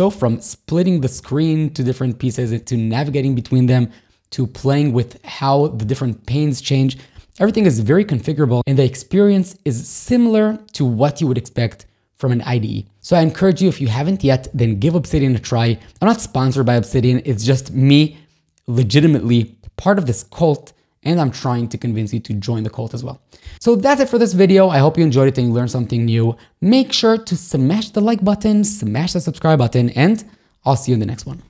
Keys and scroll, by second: 0.2 shift+super+j, 1.3 shift+super+l, 2.5 ctrl+k, 2.7 ctrl+h, 3.6 ctrl+l, 4.5 shift+super+a, 7.5 super+,.